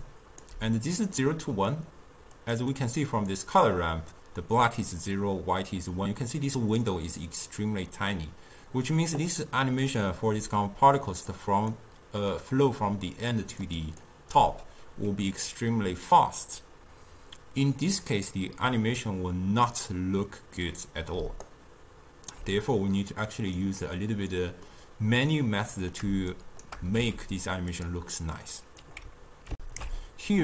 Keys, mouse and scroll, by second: 0.0 d, 0.1 right click, 0.5 d, 1.2-2.5 middle drag, 2.5 click, 2.8-5.9 drag, 10.5-15.0 typing, 11.2 click, 11.6 click, 13.4 click, 13.9 click, 21.2 d, 21.5 right click, 22.4 d, 23.5 click, 23.9 click, 24.8-26.4 middle drag, 26.4 shift+right click, 27.0 g, 28.5 click, 29.6 ctrl+alt+shift+q.